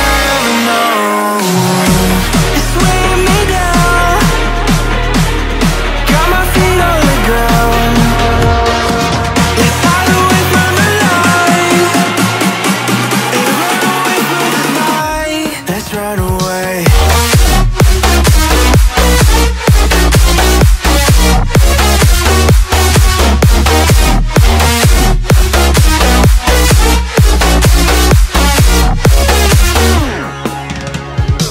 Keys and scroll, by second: 10.2 ctrl+i, 20.4 Left, 21.0 Down, 21.3 Right, 28.9 space.